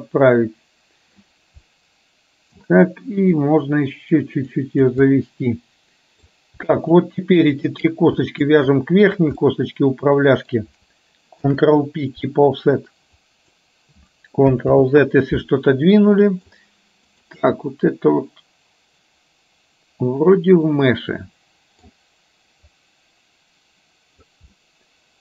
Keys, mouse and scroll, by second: 1.7-2.7 middle drag, 3.6-4.9 drag, 5.2-6.3 middle drag, 6.9 shift+click, 8.6 shift+click, 9.6-10.6 middle drag, 11.4 ctrl+p, 13.3 click, 14.8 ctrl+z, 15.9 middle click, 17.6-21.9 middle drag, 22.7-24.3 drag, 24.7 middle click.